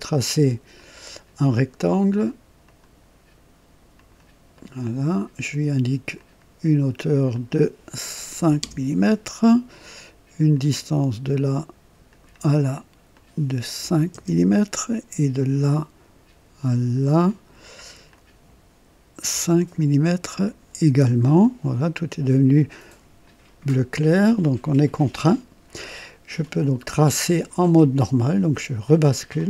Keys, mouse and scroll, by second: 0.7 click, 2.6 click, 3.9 click, 4.5 right click, 6.1 click, 7.3 click, 8.3 KP_5, 8.7 KP_Enter, 10.4 click, 12.0 click, 13.1 click, 13.9 KP_5, 14.1 Return, 15.3 click, 17.0 click, 18.0 click, 19.3 KP_5, 20.4 click, 21.2 scroll up 1, 22.7-23.4 drag, 24.1-25.0 drag, 28.4 click.